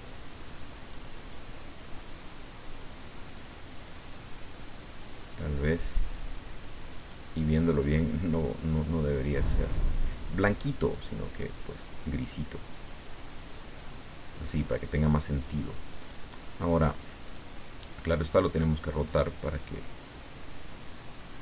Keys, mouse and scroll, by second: 0.9-5.4 drag, 7.0 click, 9.6 click, 10.9-14.7 drag, 16.0 click, 17.2 click, 18.2-20.8 drag.